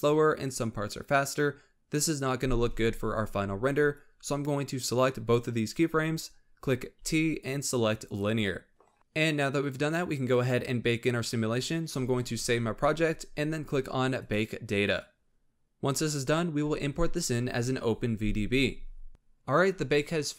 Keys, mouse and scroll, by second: 3.8-6.9 drag, 6.9 t, 11.9 ctrl+s, 14.0-19.3 drag.